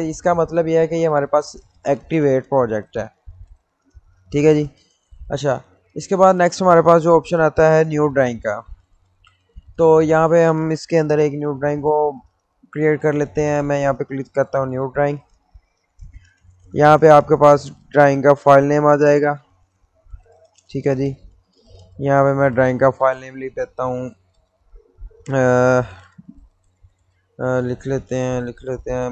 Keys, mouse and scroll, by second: 0.4-0.9 scroll down 1, 2.1 click, 13.8 click, 17.7 click, 22.7 click, 22.7 click, 26.3 click.